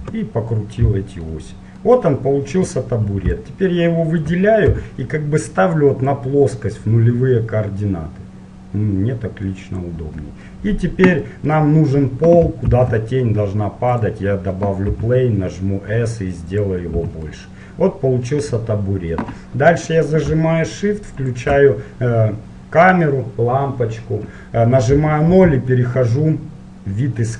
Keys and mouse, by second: 1.0-3.5 middle drag, 3.5-5.4 drag, 4.9 KP_1, 5.4 middle click, 6.2 click, 10.4-12.0 middle drag, 12.9 shift+a, 15.2 s, 17.2 z, 17.3 middle click, 17.5 click, 18.2-20.4 middle drag, 21.4-23.3 drag, 23.3 middle click, 25.0 KP_0.